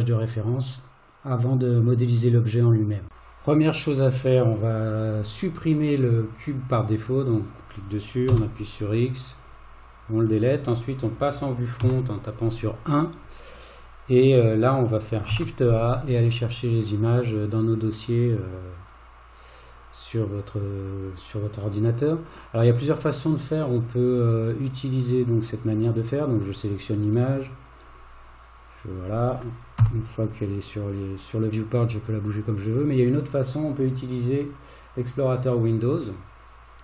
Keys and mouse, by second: 7.6 click, 8.3 x, 11.8 KP_1, 15.3 shift+a, 28.9 click, 29.8 g.